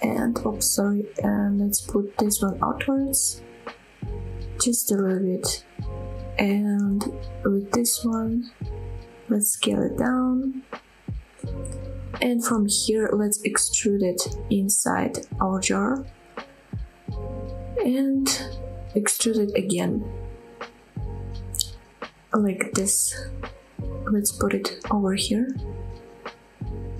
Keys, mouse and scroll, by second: 0.5 h, 1.1 ctrl+z, 1.6 g, 2.9 click, 3.2 middle click, 4.1 g, 6.5 click, 7.0 middle click, 7.6 click, 7.9 middle click, 8.5 click, 8.7 middle click, 9.0 middle click, 9.7 s, 11.4 click, 11.9 click, 12.1-13.4 middle drag, 14.0 e, 16.9 click, 17.1-20.1 middle drag, 20.1 e, 21.7 click, 21.9 middle click, 22.9 g, 25.5 click, 25.7-26.9 middle drag.